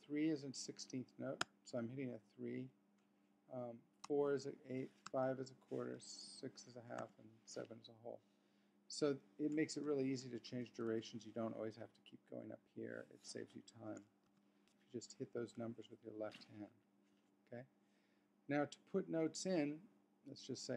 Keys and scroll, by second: 2.8 3, 4.8 4, 6.8 typing, 8.8 7, 10.8 typing, 12.8 4, 14.8 5.